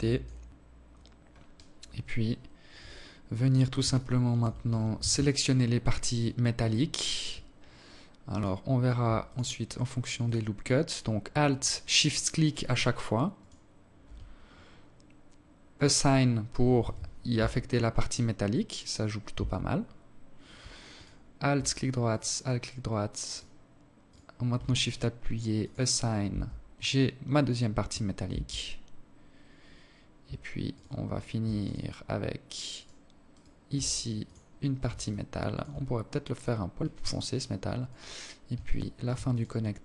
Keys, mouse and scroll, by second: 0.2-0.7 scroll up 10, 2.7 alt+shift+click, 3.7 z, 4.1 scroll up 2, 4.3 scroll down 1, 5.6 scroll up 2, 5.8 scroll down 1, 7.0 alt+right click, 7.9 alt+shift+right click, 8.9 alt+shift+right click, 10.3 alt+shift+right click, 12.1 alt+shift+right click, 14.5 click, 15.5 z, 16.1 Tab, 18.1 Tab, 19.7 alt+right click, 20.7 alt+shift+right click, 22.0 alt+shift+right click, 22.8 alt+shift+right click, 24.3 click, 25.0 Tab, 27.0 Tab, 29.5 alt+right click, 30.3 alt+shift+right click, 31.5 alt+shift+right click, 32.0 alt+shift+right click, 32.9 click, 33.8 alt+shift+click, 36.6 right click, 37.4 alt+right click, 38.0 alt+shift+right click, 38.7 alt+right click, 39.5 alt+shift+right click.